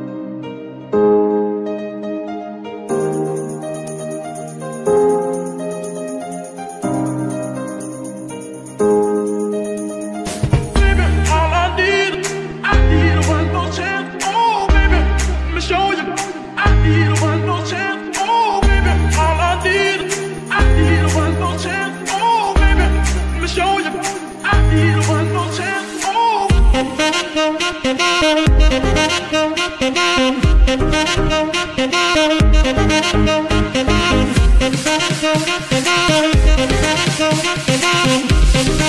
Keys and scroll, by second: 0.9 Escape, 1.6 s, 1.8 x, 3.3 Escape, 4.0 r, 5.5 Escape, 5.9 g, 8.6 Escape, 11.8 g, 15.1 Escape, 16.4 KP_0, 16.5 KP_Decimal, 16.8 KP_5, 17.0 Return, 17.6 g, 19.4 Escape, 22.4 g, 24.0 Escape, 25.2 r, 26.5 Escape, 29.8 g, 29.9 y, 31.4 r, 32.9 Escape, 34.3 g, 34.4 y, 35.9 r, 37.3 Escape, 38.2 alt+g.